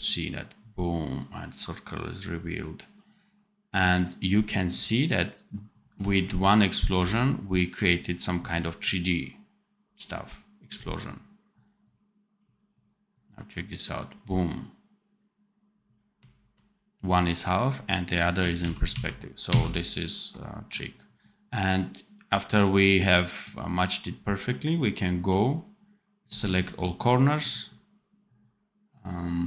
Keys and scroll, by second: 6.8 v, 18.5 ctrl+z.